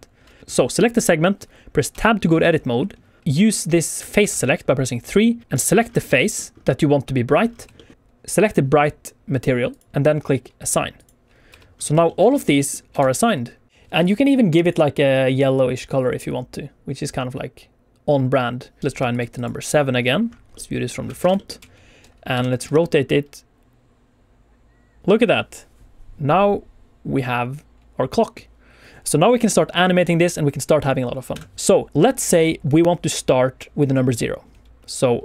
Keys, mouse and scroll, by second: 0.4 alt+shift+z, 0.4 alt+a, 0.4 click, 0.4 middle click, 0.4 scroll up 1, 1.8 Tab, 3.3 1, 4.0 1, 4.1 2, 4.2 3, 5.4 click, 5.7 scroll up 2, 6.0 shift+middle click, 6.5 scroll up 2, 6.6 middle click, 7.3 scroll down 2, 7.7 shift+middle click, 7.8 middle click, 9.6 click, 10.9 click, 11.4 Tab, 11.7 scroll down 2, 12.0 shift+middle click, 12.2 alt+a, 12.5 middle click, 12.9 alt+shift+z, 13.2 middle click, 13.9 alt+a, 13.9 click, 14.9 click, 18.8 alt+a, 18.8 click, 19.0 shift+click, 19.3 shift+click, 19.5 shift+click, 20.5 middle click, 20.8 scroll down 1, 21.1 alt+shift+z, 21.3 shift+middle click, 21.5 q, 22.2 r, 22.5 x, 22.6 x, 31.2 Escape, 34.8 click.